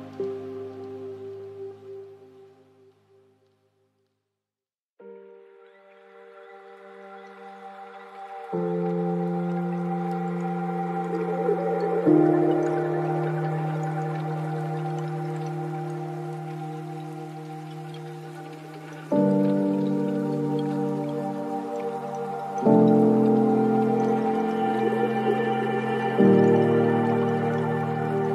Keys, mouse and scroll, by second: 0.3 shift+a, 4.0 drag, 5.5 space, 7.1 space, 7.9 shift+a, 12.9 middle click, 15.2-16.3 drag, 16.7 shift+d, 19.8-22.4 drag, 22.4 space, 24.5-25.9 middle drag, 25.9-26.4 scroll down 2, 26.4 middle click, 27.1-27.5 scroll down 2, 27.5-28.3 middle drag.